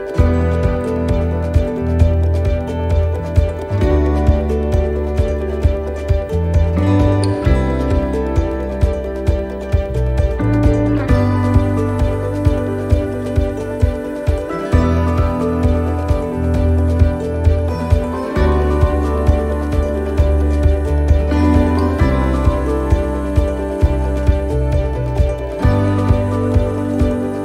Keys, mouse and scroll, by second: 0.0 middle click, 1.0 scroll down 1, 1.4 shift+middle click, 1.9 middle click, 2.1 scroll down 1, 2.7 shift+middle click, 4.6 click, 18.5 scroll up 1, 19.2 middle click, 19.2 scroll up 2, 21.9-23.1 scroll down 4, 22.4 shift+middle click, 23.3 middle click, 23.6 scroll down 1, 23.9 middle click, 24.9 click, 25.9 shift+middle click, 26.3 scroll up 1.